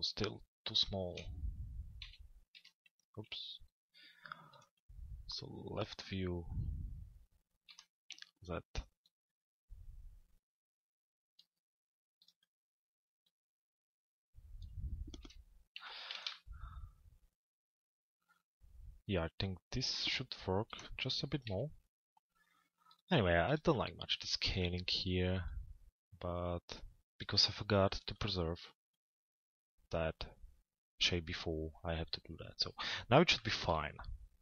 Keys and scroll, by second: 1.7 l, 3.1 z, 7.4 l, 8.1 z, 14.7 p, 15.7 z, 20.4 l, 21.5 z.